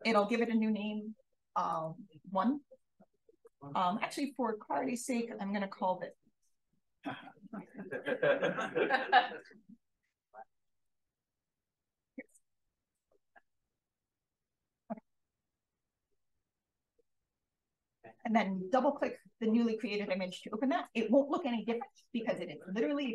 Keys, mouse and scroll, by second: 0.1 click, 1.6 click, 4.5 BackSpace, 5.4 Return, 7.5 click, 9.6 click, 10.8 Right, 11.1-12.4 typing, 13.4 click, 16.0 click, 17.0-18.4 drag.